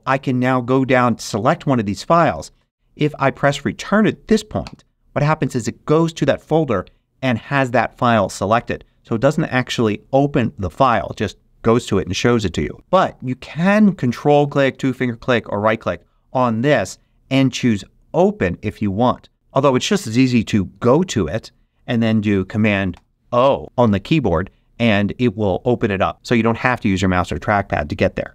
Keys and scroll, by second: 0.8 Down, 4.6 Return, 20.6 Return, 22.9 super+o.